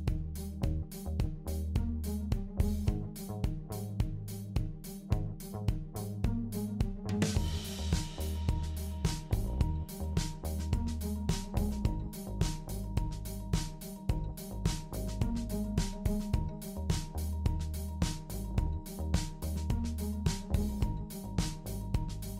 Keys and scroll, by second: 16.4 typing.